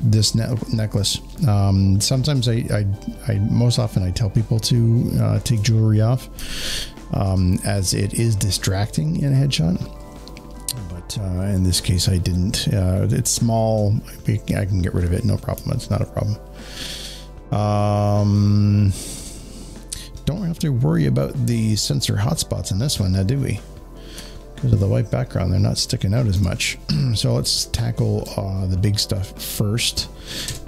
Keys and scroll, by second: 1.9 space, 2.1 space, 7.2 space, 8.2 space, 15.4 space, 15.7 space, 20.8 space, 21.8 space, 26.2 s, 30.3 ctrl+z.